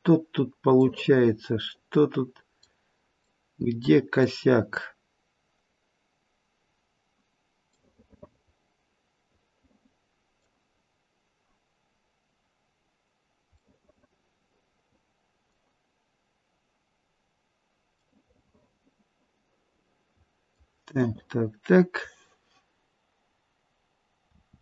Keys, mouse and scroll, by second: 0.9 middle click, 3.3 middle click, 4.2 middle click, 6.7-7.2 scroll down 1, 7.9 middle click, 8.1 middle click, 8.7 middle click, 10.8-11.8 scroll up 1, 11.8-13.3 scroll up 1, 13.6 middle click, 18.1 middle click, 24.3 r.